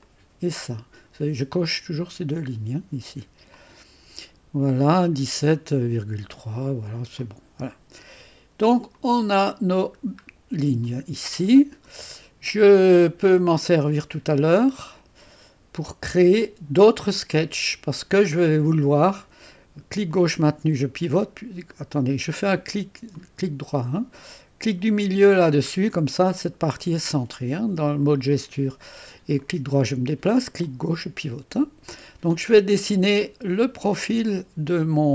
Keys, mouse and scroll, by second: 0.0 click, 0.8 click, 3.5 click, 7.2 click, 8.9 click, 10.6-10.9 scroll up 1, 10.9-12.2 right drag, 12.9-13.9 drag, 14.8 scroll up 2, 14.8-18.2 right drag, 20.1-21.8 drag, 21.8 middle click, 25.4 middle click, 26.0-28.5 drag, 29.4-30.7 right drag, 30.7-32.6 drag.